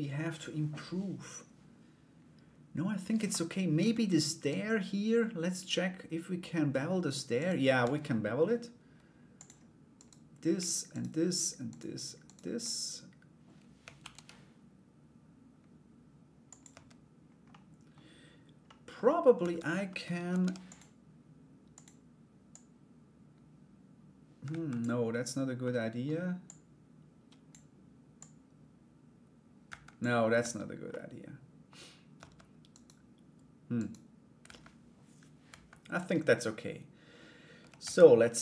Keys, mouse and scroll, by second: 7.0 right click, 7.4 Tab, 8.9 click, 9.5 right click, 10.5 shift+right click, 11.3 shift+right click, 11.8 shift+right click, 13.6 ctrl+b, 16.3 Tab, 17.1 middle click, 18.2 middle click, 19.9 ctrl+r, 22.1-24.3 drag, 25.2 middle click, 26.1 click, 27.7-29.5 drag, 30.0 Tab, 30.5 middle click, 31.7 Tab, 32.3 right click, 33.3 right click, 34.0 /, 35.0 /, 35.7 Tab, 37.4 ctrl+s, 37.8-38.4 middle drag.